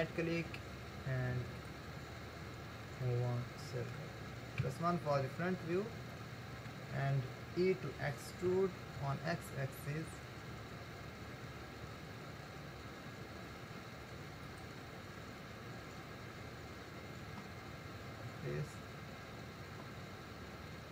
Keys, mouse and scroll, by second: 3.1-4.7 middle drag, 4.7 KP_1, 6.1-8.9 shift+middle drag, 8.9 e, 15.2-16.1 scroll down 7, 16.9-17.7 scroll down 2, 17.7-18.2 scroll down 2, 18.9-20.8 scroll up 2.